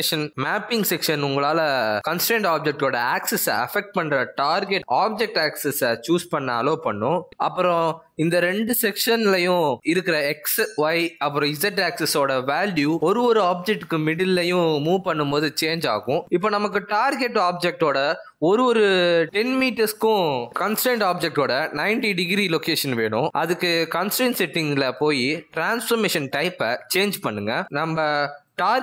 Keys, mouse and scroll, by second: 2.0 click, 2.6 click, 3.5 click, 7.5 click, 9.9 click, 14.5 click, 19.6 click, 22.1 click.